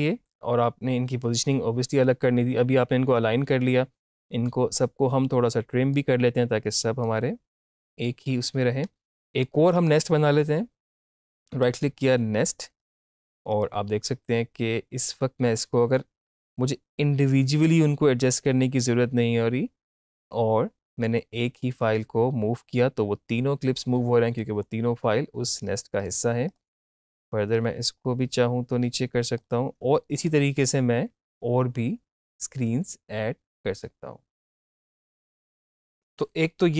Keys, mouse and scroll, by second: 4.8-9.8 drag, 9.8 right click, 11.6-25.6 drag, 26.0-36.7 drag.